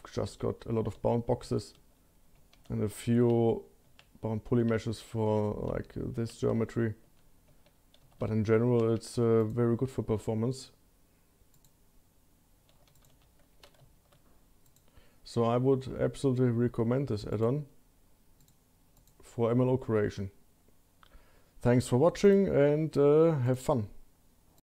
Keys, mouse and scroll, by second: 8.7-9.7 shift+middle drag, 11.7 click, 12.9 q, 14.5-17.4 middle drag, 17.4 click, 18.4 click, 19.0 click.